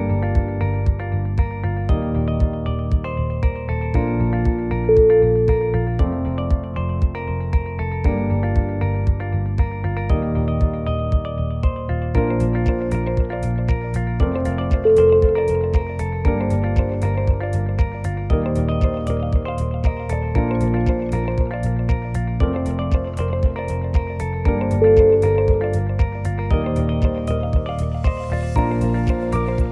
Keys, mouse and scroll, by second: 0.4 e, 2.0-2.4 scroll down 4, 2.4 middle click, 3.2 shift+middle click, 4.1 middle click, 5.5 alt+click, 5.9 shift+middle click, 7.1 shift+click, 7.5 g, 11.7 middle click, 12.1 g, 15.1 middle click, 16.7 scroll up 1, 16.9 middle click, 17.3 scroll up 1, 17.7 click, 18.2 click, 19.3 g, 22.8 click, 23.3 g, 25.4 click, 25.8 middle click, 27.1 g, 28.7 middle click, 29.2 g.